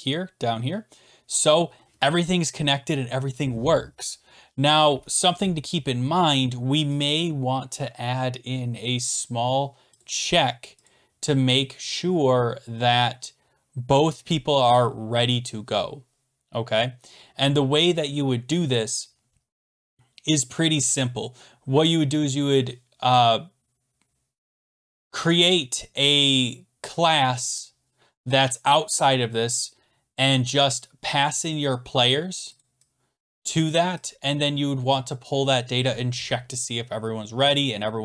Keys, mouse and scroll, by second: 1.5 click, 9.1 click, 10.0 click, 10.9 click, 23.1 click, 24.7-26.1 scroll, 27.4 scroll, 32.1 click, 32.6 click, 33.3 click, 33.7 click, 34.3 click.